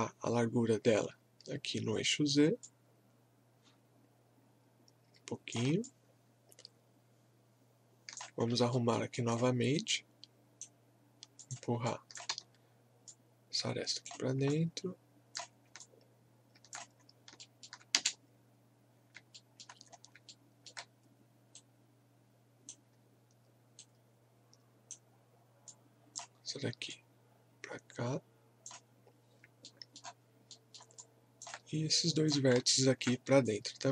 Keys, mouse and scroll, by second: 2.6-5.8 drag, 5.8-8.4 alt+drag, 8.4 scroll up 1, 8.7 alt+middle click, 9.2 alt+click, 9.7-11.4 right drag, 11.4 click, 12.3 w, 13.1 click, 13.1-14.5 drag, 14.5 click, 15.8 alt+click, 17.0 scroll up 1, 17.4 alt+middle click, 17.9 space, 19.0 scroll up 1, 19.3 alt+middle click, 19.9 scroll up 1, 20.3 alt+middle click, 21.5-25.7 right drag, 25.7-29.6 drag, 29.6 alt+middle click, 31.0 alt+click, 32.7 alt+click, 33.4-33.9 shift+drag.